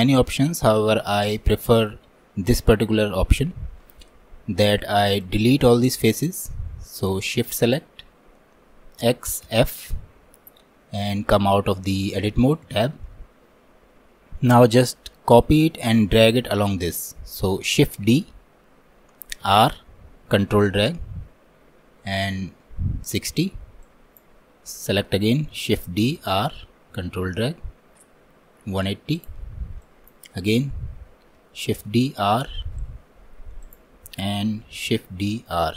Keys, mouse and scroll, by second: 5.3-6.9 drag, 9.1 x, 12.7 Tab, 18.1 shift+d, 23.9-25.8 drag, 25.8 shift+d, 29.9-31.6 drag, 31.6 shift+d, 34.9 shift+d.